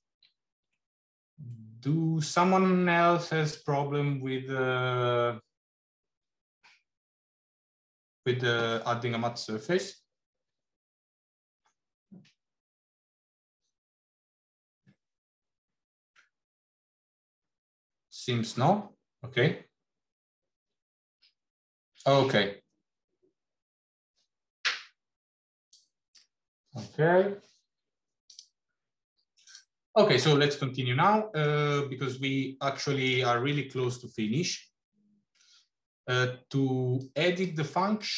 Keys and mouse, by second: 0.3 shift+a, 28.2 click, 30.9 middle click, 31.9-32.9 middle drag, 37.8 click.